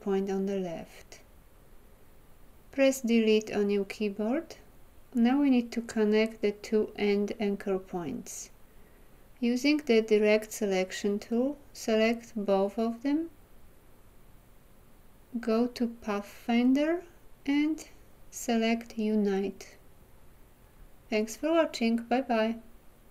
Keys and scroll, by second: 3.3 Delete.